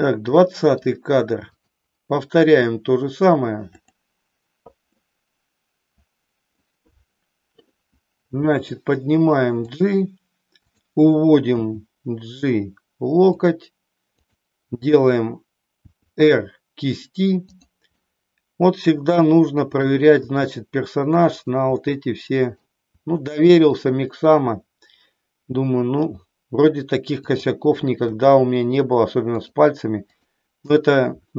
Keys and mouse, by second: 0.6 middle click, 1.5-2.7 drag, 5.1-6.7 middle drag, 8.3 g, 9.9 click, 11.7 g, 13.5 click, 15.7 r, 17.6 click, 18.1-20.0 middle drag, 20.3 r, 21.5 click, 21.9 middle click, 23.0 r, 23.9 click, 26.1 g, 27.3 click, 28.0 r, 29.5 click.